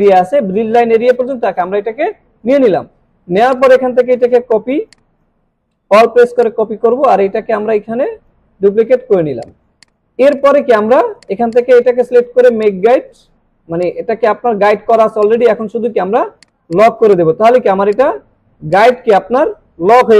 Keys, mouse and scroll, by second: 3.5-4.4 click, 4.7 space, 4.9-5.5 drag, 6.4-8.3 alt+drag, 9.0 alt+scroll down 1, 9.3 space, 9.5 click, 10.3 right click, 11.2 click, 12.6 right click, 13.8 click, 15.2 right click, 16.4 click, 17.1 click, 18.7 click.